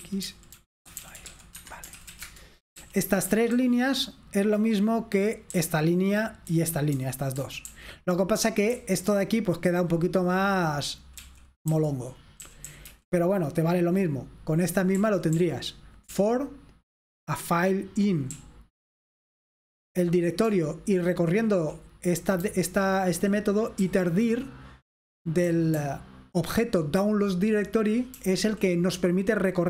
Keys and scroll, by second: 0.0-3.6 typing, 5.6-7.7 typing, 8.7-9.8 typing, 11.3-12.9 typing, 15.1-16.1 typing, 18.4-21.4 typing, 22.5-23.8 typing, 25.3-26.0 typing.